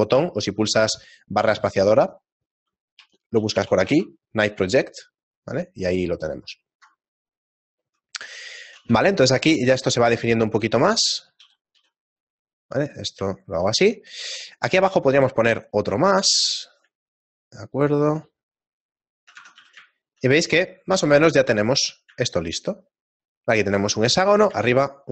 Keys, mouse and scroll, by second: 0.4 middle click, 0.9 space, 8.4 shift+middle click, 8.9 Tab, 9.4 shift+middle click, 10.0 Tab, 10.6 ctrl+r, 13.4 shift+middle click, 15.0 middle click, 15.1 ctrl+r, 19.4 Tab, 19.9 shift+middle click, 19.9 a, 20.8 right click, 21.4 click, 21.9 middle click, 22.6 shift+middle click.